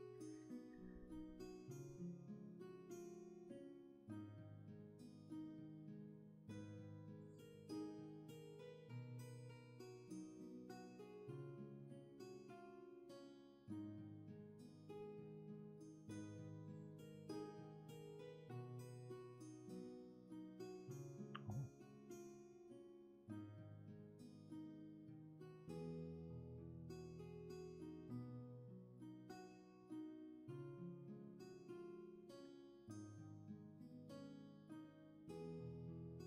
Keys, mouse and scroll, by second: 7.9 ctrl+z, 18.8 space, 19.2 ctrl+z, 22.5 ctrl+z, 25.1 ctrl+shift+z, 27.5 ctrl+z, 34.1 ctrl+z.